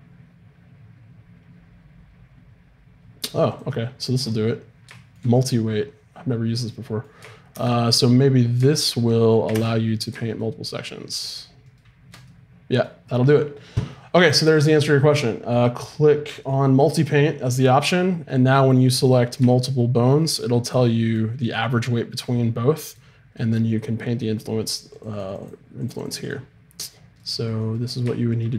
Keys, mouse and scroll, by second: 3.5-5.3 drag, 4.9 middle click, 9.5 shift+space, 10.6-13.6 drag, 18.3-20.3 middle drag, 19.0-22.2 right drag, 20.7-22.9 middle drag, 24.9-28.1 drag, 26.8-28.5 right drag.